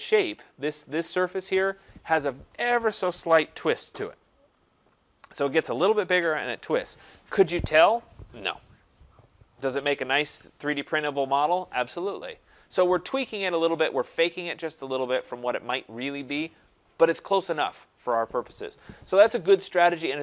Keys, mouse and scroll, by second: 0.2 click, 19.6-20.2 scroll down 3.